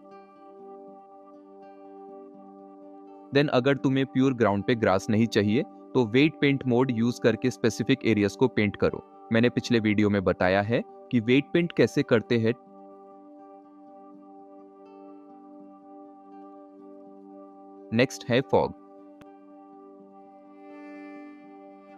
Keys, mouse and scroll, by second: 2.6 shift+middle click, 5.7-6.9 drag, 7.2 f, 7.3 click, 8.8 f, 10.6 click, 11.8 click, 12.7 f, 13.0 shift+KP_0, 13.4 middle click, 13.5 click, 13.7 ctrl+s, 14.6-14.9 drag, 15.2 click, 15.7 click, 16.1 click, 16.6 click, 16.7 ctrl+s.